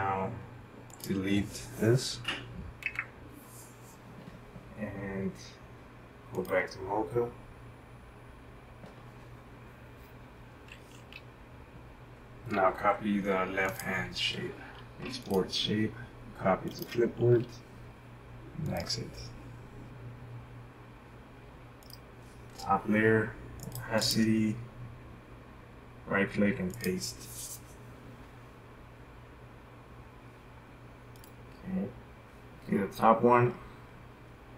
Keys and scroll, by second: 2.8 Delete.